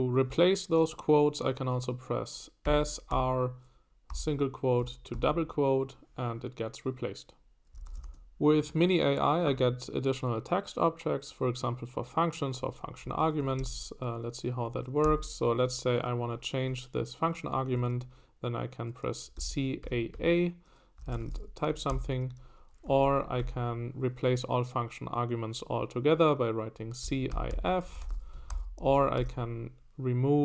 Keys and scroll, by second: 2.4-4.1 typing, 5.1 shift+', 7.5-8.5 typing, 13.0 Escape, 13.6 Escape, 15.0-16.1 typing, 19.1-23.9 typing, 26.8-29.3 typing.